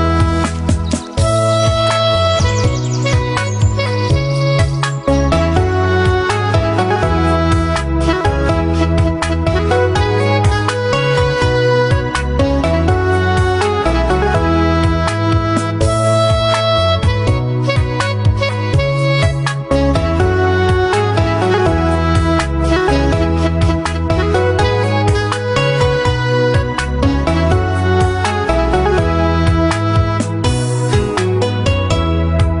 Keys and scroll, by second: 2.4 ctrl+t.